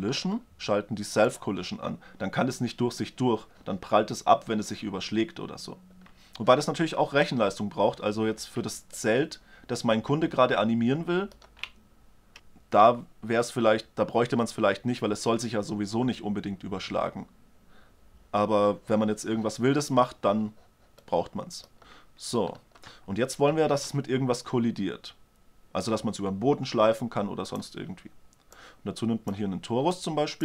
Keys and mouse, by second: 0.1-3.7 drag, 6.2-8.4 middle drag, 9.5-11.3 middle drag, 21.6 drag, 21.8 alt+a, 22.1 click, 24.1 shift+a, 29.1-29.9 drag.